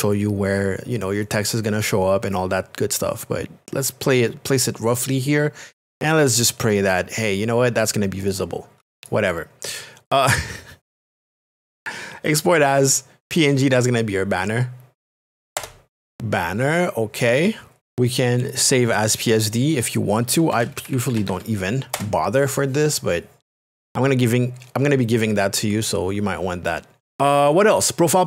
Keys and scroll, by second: 15.3 e, 20.3-21.9 typing.